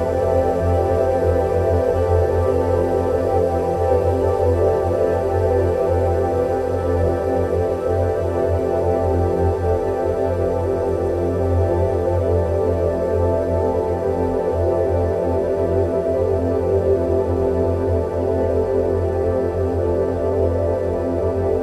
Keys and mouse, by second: 0.7-3.9 middle drag, 4.3 Tab, 5.8 3, 6.0 click, 6.8 middle click, 7.8-12.1 drag, 13.2 ctrl+z, 14.0 1, 15.7 shift+click, 17.1 shift+click, 19.5-20.2 drag.